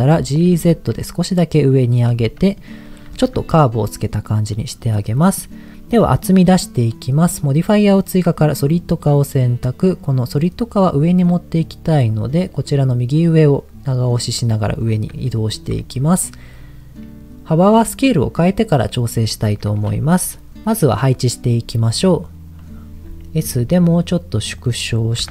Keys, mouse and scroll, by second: 0.1 g, 0.5 z, 2.0 click, 2.3 middle click, 2.8 middle click, 3.3 Tab, 4.5 middle click, 5.3-6.7 middle drag, 10.9-13.9 drag, 15.5 shift+middle click, 19.3 shift+middle click, 23.6 s, 24.6 click, 25.2-25.3 typing.